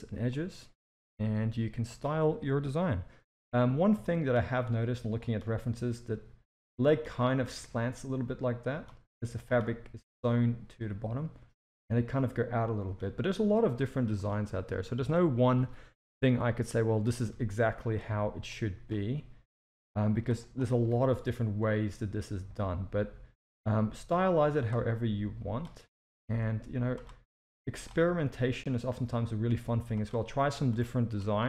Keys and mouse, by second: 0.3 click, 1.0 g, 4.0 shift+middle click, 4.7 click, 5.5 g, 7.3 click, 7.5 g, 9.1 click, 9.6 g, 13.5 shift+middle drag, 13.9 z, 15.0 Tab, 15.6 alt+a, 16.4 shift+middle click, 17.3 Tab, 17.6 z, 18.1 alt+a, 18.5-18.9 drag, 19.3 s, 20.7 s, 24.5 g, 25.0 click, 25.8 click, 26.3 g, 27.4 click, 27.9 g, 30.6 click, 31.2 g.